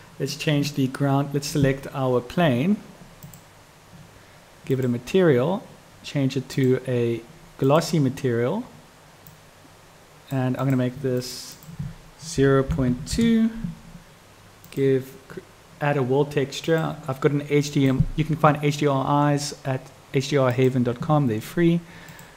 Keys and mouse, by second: 3.3 click, 4.9-5.3 drag, 6.5-8.0 drag, 9.4-10.5 drag, 10.7-11.3 drag, 11.8-14.0 drag, 14.8 click, 16.8-18.2 drag, 20.7 click.